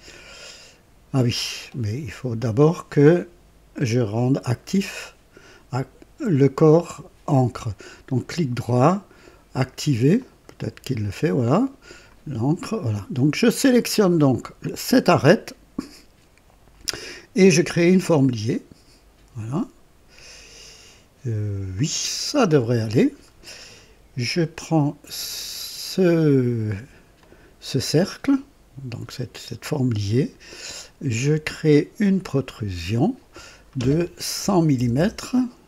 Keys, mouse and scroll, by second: 8.1 right click, 10.1 click, 14.6 click, 18.1 click, 21.7 click, 23.2 scroll down 1, 25.2 click, 27.1-29.1 drag, 32.0 click, 34.3 KP_1, 34.7 KP_0, 34.9 KP_0.